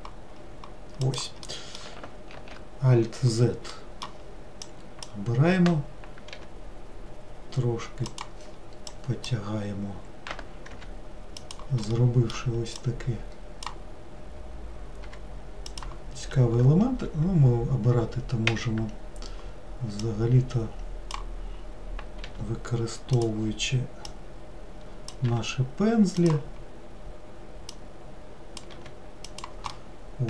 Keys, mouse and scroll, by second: 1.9 middle click, 2.5 alt+z, 3.9-5.2 middle drag, 5.2 click, 6.5 g, 9.4 click, 10.9 g, 12.0-13.8 middle drag, 13.8 click, 15.2 g, 18.7 w, 20.2-22.4 drag, 22.4 g, 24.3-25.5 drag, 25.5 g, 27.9-28.9 drag, 28.9 g, 29.9 middle click.